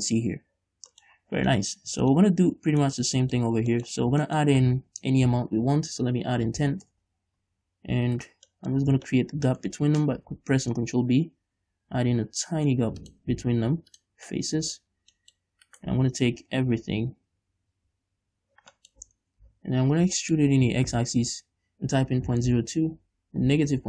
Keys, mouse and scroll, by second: 0.3-0.9 scroll up 2, 0.9-1.2 scroll down 2, 1.6 scroll down 1, 1.8 middle click, 2.5 scroll up 1, 3.0 right click, 3.2 Tab, 3.5 middle click, 3.7-4.1 scroll up 1, 4.1 middle click, 4.3 scroll down 1, 4.6 shift+middle click, 5.2 ctrl+r, 8.6 right click, 9.0-13.4 middle drag, 9.2 scroll up 2, 10.5 ctrl+b, 13.4 shift+click, 13.6 x, 14.6 middle click, 15.3 scroll down 2, 16.0 right click, 16.8 l, 19.3 z, 19.4 click, 19.4 middle click, 19.4 right click, 20.2 scroll up 1, 20.5 shift+middle click, 21.0 e.